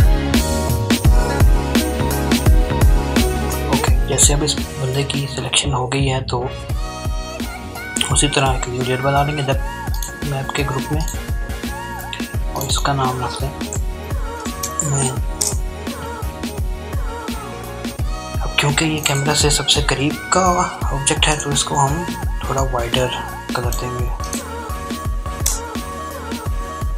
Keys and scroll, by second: 12.4-13.3 typing, 13.6 Return, 23.7 alt+BackSpace, 23.7 alt+\, 25.4 ctrl+d.